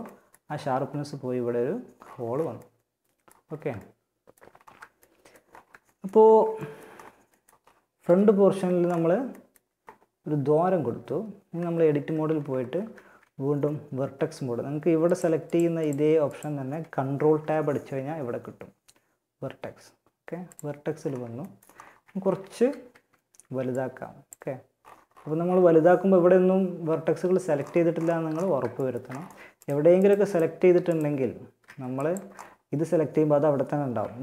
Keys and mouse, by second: 7.3 KP_1, 10.1 Tab, 10.7 Tab, 11.1 Tab, 11.9 ctrl+Tab, 14.3 click, 16.3 ctrl+Tab, 21.1 z, 21.7 a, 22.1 a, 22.6 b, 30.1-31.9 right drag, 31.0 b, 31.9-33.2 middle drag, 33.2 g.